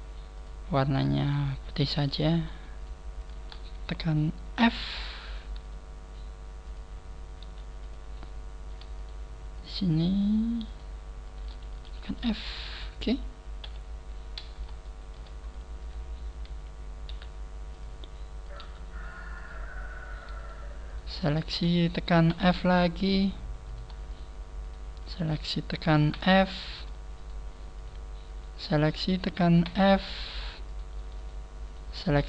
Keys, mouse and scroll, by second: 0.4 click, 1.3 click, 1.8 right click, 2.4 shift+right click, 2.8 shift+right click, 3.2 shift+right click, 4.6 f, 5.2 right click, 5.6 g, 7.4 click, 7.4 g, 7.9 click, 9.0 shift+right click, 9.6 shift+right click, 11.8 shift+right click, 11.8 f, 12.2 middle click, 13.6 KP_3, 13.6 middle click, 14.4 scroll down 2, 14.8 shift+middle click, 15.4 scroll up 1, 15.8 shift+middle click, 15.8 right click, 15.8-16.2 scroll down 1, 17.1 g, 18.4 click, 18.4 right click, 18.6 g, 20.4 shift+right click, 20.9 shift+right click, 21.3 shift+right click, 22.3 f, 22.7 shift+middle click, 23.6 right click, 24.1 shift+right click, 24.6 shift+right click, 25.0 shift+right click, 26.1 f, 26.7 shift+right click, 27.2 shift+right click, 27.8 shift+right click, 28.3 shift+right click, 29.6 f, 30.6 right click, 31.2 shift+right click, 31.6 shift+right click, 32.0 shift+right click.